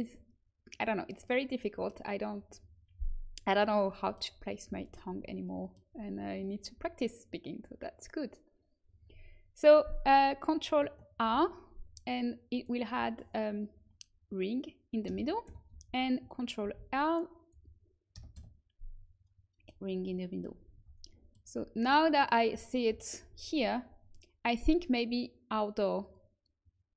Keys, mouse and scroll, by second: 3.8-5.7 middle drag, 11.2 ctrl+r, 16.6 ctrl+r, 20.5 a, 20.7 Tab, 21.7 Tab, 22.8 KP_1, 23.1 a.